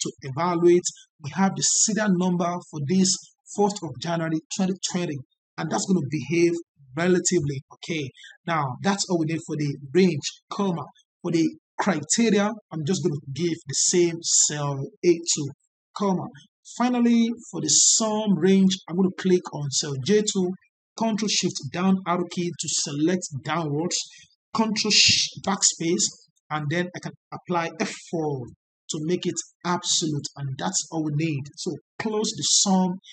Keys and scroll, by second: 0.0 F9, 6.4 ctrl+z, 25.3 ctrl+BackSpace, 28.3 F4.